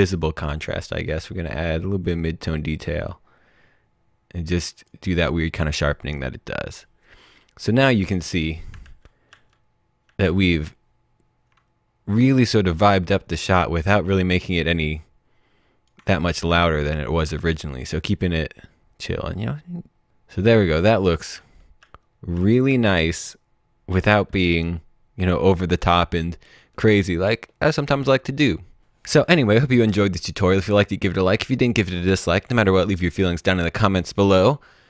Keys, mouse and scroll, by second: 1.2 click, 21.0 click, 21.3-22.6 typing, 28.8 click.